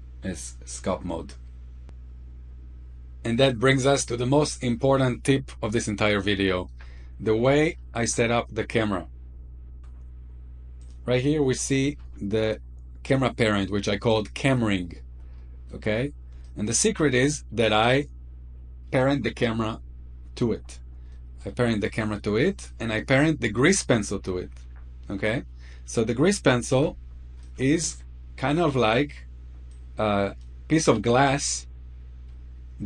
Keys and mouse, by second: 5.9-6.6 shift+middle drag, 6.9-7.4 middle drag, 7.7 shift+middle click, 9.5 shift+middle click, 10.8 click, 15.3 shift+middle click, 16.4-16.8 shift+middle drag, 17.1 shift+middle click, 21.1 middle click, 24.2-24.6 shift+middle drag, 26.7 f, 27.4-27.9 middle drag, 29.6 click, 30.7-31.5 middle drag.